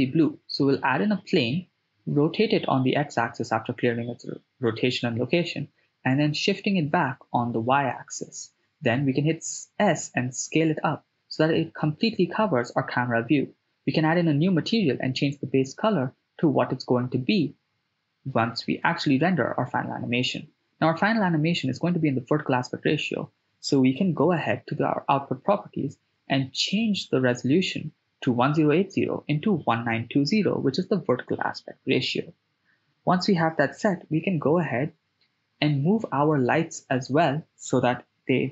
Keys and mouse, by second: 2.3 alt+g, 3.5 r, 4.0 x, 4.8 9, 4.8 0, 5.0 Return, 6.0 g, 6.2 y, 8.8 click, 9.3 s, 10.4 click, 11.9 click, 12.8 click, 14.3 click, 21.4 right click, 24.5 click, 25.5 click, 26.7-28.9 drag, 29.8-32.0 drag, 34.0-35.2 drag, 35.5 n, 35.8-37.3 ctrl+middle drag, 38.2 click.